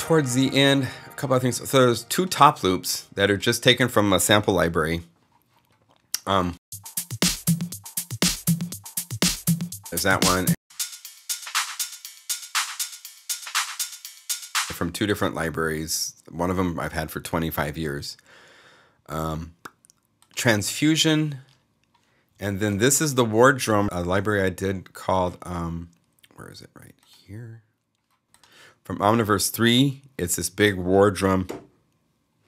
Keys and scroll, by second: 4.5 alt+shift+s, 14.3 space, 23.8 alt+s.